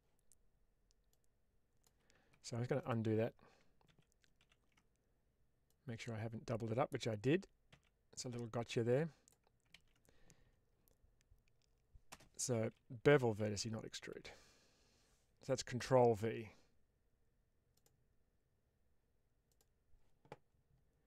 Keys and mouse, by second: 1.0 click, 2.0 Escape, 2.7 click, 3.8 ctrl+z, 4.3 ctrl+z, 5.6-6.8 drag, 7.2 ctrl+z, 7.6 ctrl+z, 8.8 click, 9.8 ctrl+z, 12.0 space, 19.4 click.